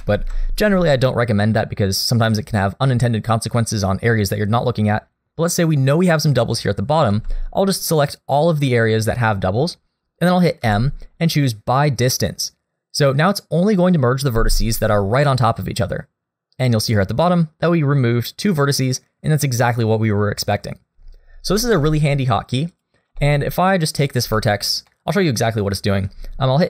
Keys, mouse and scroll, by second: 0.2 alt+a, 7.1 b, 10.6 m, 21.8 shift+middle click, 22.7 click, 23.2 shift+middle click, 23.7 middle click, 23.7 scroll up 1, 24.3 shift+middle click, 24.6-24.9 scroll up 1, 24.9 middle click.